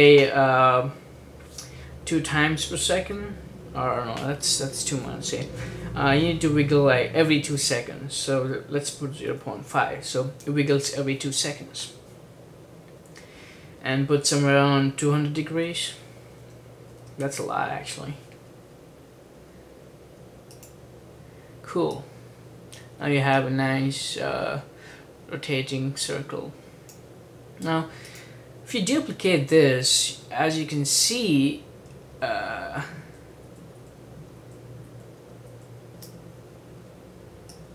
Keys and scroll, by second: 0.0-0.3 typing, 8.7-10.4 typing, 13.3 ,, 15.1-18.0 typing, 29.5 super+d, 29.9 super+d, 30.3 super+d, 30.5 super+d, 30.8 super+d, 31.1 super+d, 31.3 super+d, 32.2 super+d, 33.2 super+d, 33.9 super+d, 34.5 super+d, 35.2 super+d, 35.8 super+d.